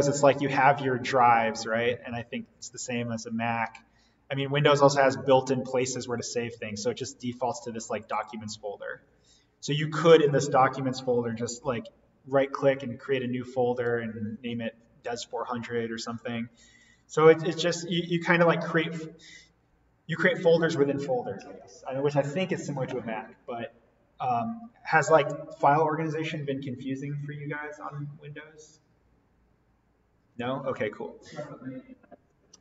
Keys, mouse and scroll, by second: 7.1 click, 11.2 right click, 15.0 click.